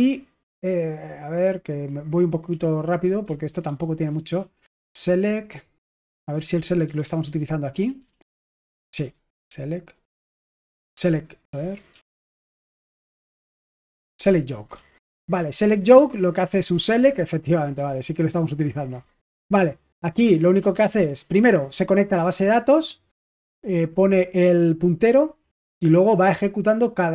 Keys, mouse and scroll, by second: 0.0-8.1 typing, 9.0 ctrl+u, 11.8 ctrl+d, 13.2 typing, 13.8 ctrl+u, 14.2 ctrl+d, 14.7-16.5 typing, 17.1 ctrl+u, 18.5 typing, 19.6-21.7 typing, 23.3 typing, 25.7 typing.